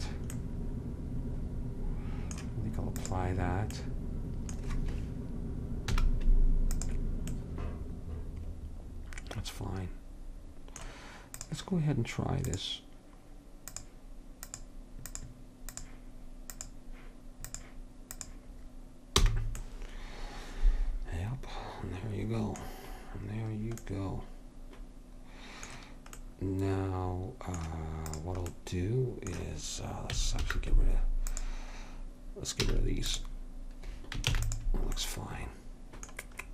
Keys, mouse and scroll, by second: 3.1-4.8 drag, 6.0 z, 11.5-17.6 drag, 17.7-20.1 drag, 19.3 h, 28.2-29.9 drag, 30.5 alt+h, 32.8 x, 34.4 ctrl+s.